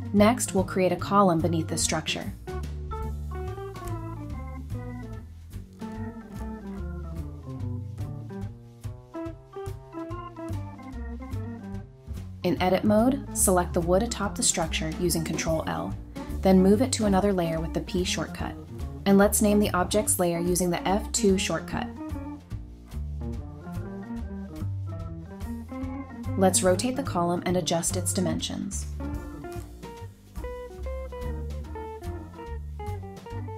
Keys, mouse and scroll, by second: 0.0-0.1 typing, 1.4-1.9 scroll down 1, 1.7-5.0 typing, 4.8 scroll up 1, 6.4 middle click, 7.2 scroll up 1, 7.3 typing, 8.2 scroll down 1, 8.4 middle click, 10.2 scroll up 1, 11.5 middle click, 12.3 scroll up 1, 12.5 Tab, 13.7 ctrl+l, 14.4 typing, 15.2 Tab, 15.7 typing, 17.9 F2, 18.8-20.8 typing, 22.2 Escape, 22.6 right click, 23.8-27.1 typing, 24.3 Escape, 27.4 Return, 27.8 scroll down 1, 28.1 middle click, 29.0-29.4 scroll up 1, 29.6 Tab, 30.1 middle click, 30.6 scroll down 1, 30.8 middle click, 31.1 typing, 31.9 Tab, 32.0-32.6 scroll down 1, 32.4-33.3 typing.